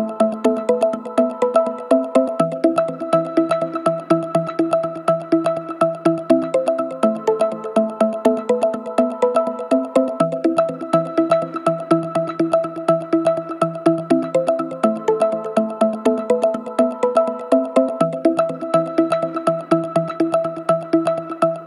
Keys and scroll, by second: 0.7 ctrl+d, 0.7 Escape, 17.1 2, 21.6 Escape.